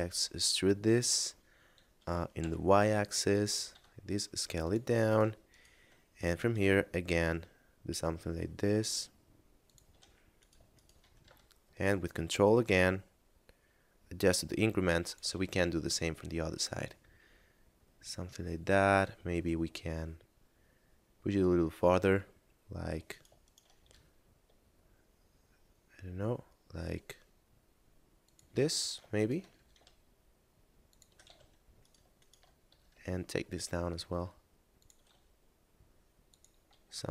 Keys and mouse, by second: 0.0 e, 3.0 click, 3.6 s, 4.4 click, 5.0 right click, 5.4 shift+right click, 5.9 e, 9.4 ctrl+click, 10.4 right click, 10.7 shift+right click, 11.1 e, 14.8 ctrl+click, 15.3 a, 15.8 middle click, 21.4 middle click, 22.9 right click, 23.4 shift+right click, 23.8 e, 28.0 ctrl+click, 28.8 right click, 29.2 shift+right click, 29.4 e, 30.8 ctrl+click, 31.2 a, 31.8 right click, 32.2 shift+right click, 32.6 e, 34.7 ctrl+click, 35.0 s, 36.2 click, 36.6 a, 36.9 middle click.